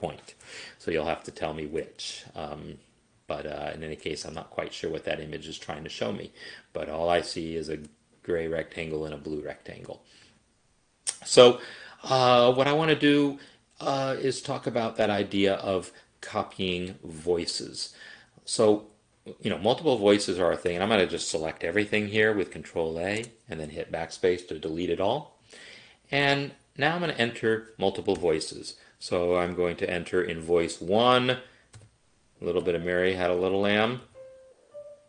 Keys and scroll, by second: 20.8 ctrl+a, 23.3 BackSpace, 28.2 n, 31.9-35.0 typing.